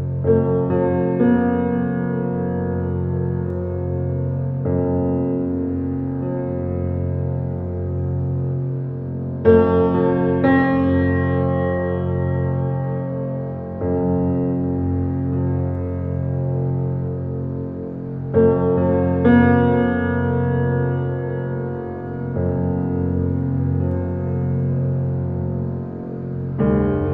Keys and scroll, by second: 11.3 ctrl+z, 23.1 shift+space.